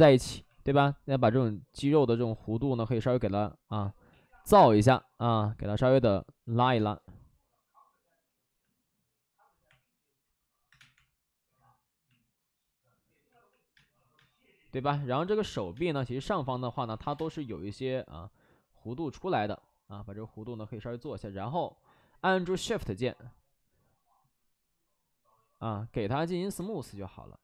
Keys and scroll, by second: 0.2 alt+s, 2.0 alt+s, 3.7 alt+s, 4.0 ctrl+z, 6.5 alt+s, 6.7 space, 9.6 3, 10.6 3, 10.7 space, 10.8 3, 13.7 space, 14.1 space, 15.5 ctrl+z, 15.6 space, 16.6 ctrl+z, 16.8 ctrl+z, 17.0 2, 17.0 space, 26.5 2.